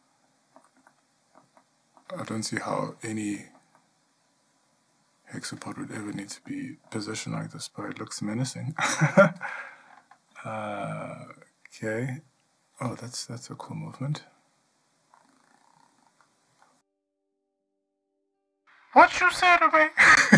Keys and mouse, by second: 19.8 click.